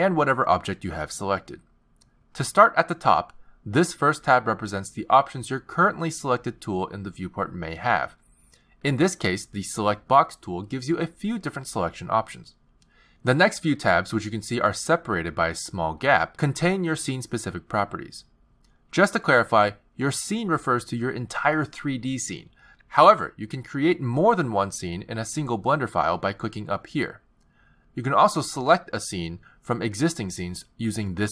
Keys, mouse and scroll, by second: 4.3 click, 7.2 t, 8.1 click, 8.9 t, 26.7 click, 29.3 click.